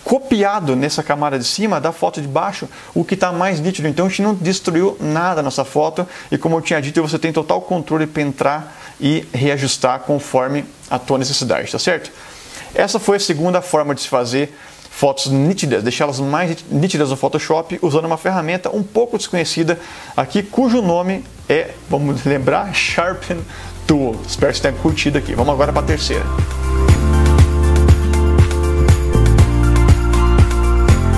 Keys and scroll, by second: 0.1 super+-.